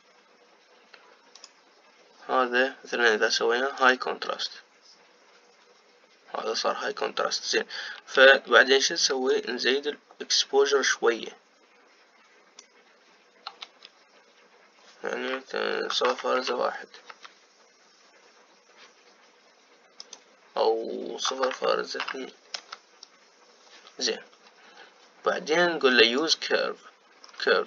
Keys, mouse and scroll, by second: 2.5-27.6 drag.